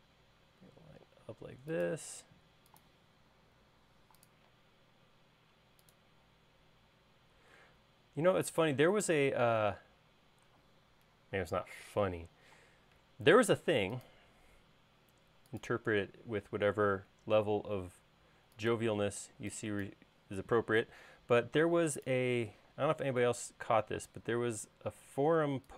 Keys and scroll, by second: 3.6 a, 11.9 Escape, 19.1 e, 20.4 space, 22.6 q.